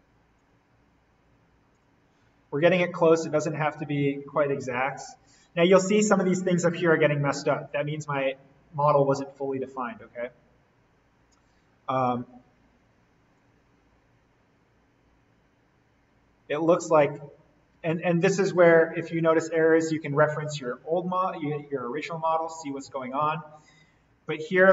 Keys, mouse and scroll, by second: 2.4 scroll up 1, 3.2 scroll down 1, 10.0-11.8 scroll down 1, 13.3-17.8 drag, 17.8 ctrl+z, 19.5-23.8 drag, 23.8-24.2 scroll down 1, 24.2-24.6 scroll up 1, 24.6-24.7 scroll down 1.